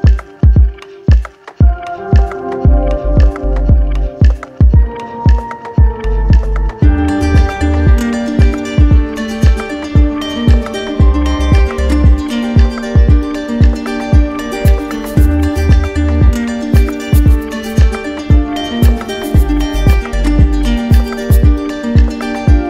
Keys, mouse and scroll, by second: 0.0-1.1 drag, 1.6 d, 3.2 right click, 5.4 alt+right click, 5.8 right click, 6.7 click, 8.0 click, 8.1 ctrl+z, 9.6 click, 12.5 click, 12.9 ctrl+z, 14.4-17.1 drag, 17.7-18.9 right drag, 18.9-19.9 drag.